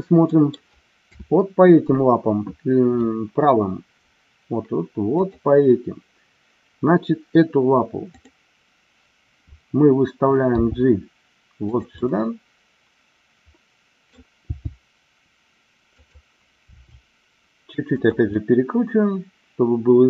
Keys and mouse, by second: 0.3 middle click, 1.0 KP_7, 5.1 click, 8.1 click, 10.5 g, 11.6 click, 11.9-14.1 middle drag, 14.5 g, 16.0 click, 16.7 r, 18.0 click, 18.2-20.0 middle drag.